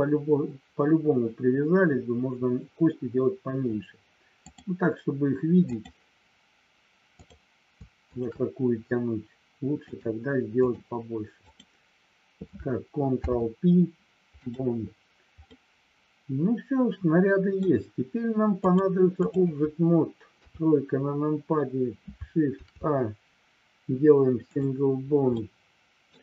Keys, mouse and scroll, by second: 4.5-5.8 drag, 7.2 click, 7.9 shift+click, 9.9 click, 11.5 click, 13.1 ctrl+p, 15.5-17.6 middle drag, 18.7 click, 20.3 KP_3, 22.5 shift+a, 25.5 middle click.